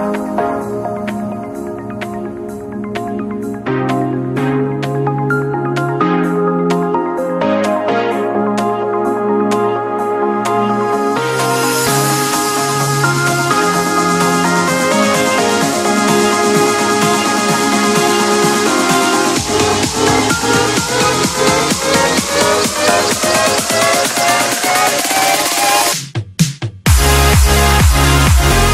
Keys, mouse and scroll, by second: 10.0 scroll down 1, 13.9 click, 16.1 KP_5, 16.4 KP_0, 16.9 Return, 18.2 click, 19.7 scroll up 1, 19.8 F10, 20.3-23.4 drag.